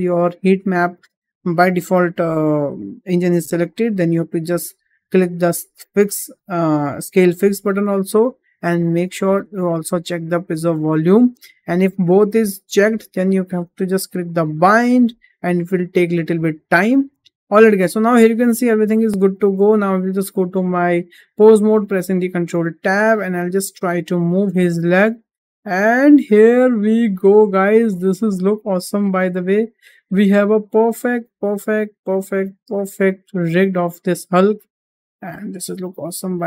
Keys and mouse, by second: 5.0 click, 14.3-17.3 drag, 17.4 shift+middle drag, 17.7 middle drag, 18.2 click, 18.5 shift+middle drag, 21.8 ctrl+Tab, 23.0-24.4 middle drag, 24.9 g, 29.2 click, 29.4 middle click, 30.0 g, 33.2 middle drag, 33.9 middle drag, 34.6 middle click, 35.2 middle click, 35.9 click.